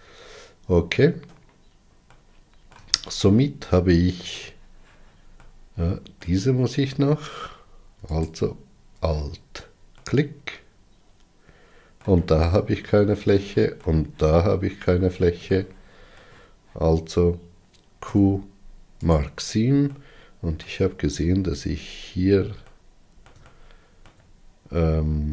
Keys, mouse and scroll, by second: 0.9-1.6 scroll down 6, 2.1-6.5 middle drag, 6.5-8.1 scroll up 4, 8.1 alt+click, 9.9-19.0 middle drag, 19.0 q, 20.0 middle click, 21.0-22.7 scroll up 9, 22.7-24.6 middle drag, 24.6 alt+z.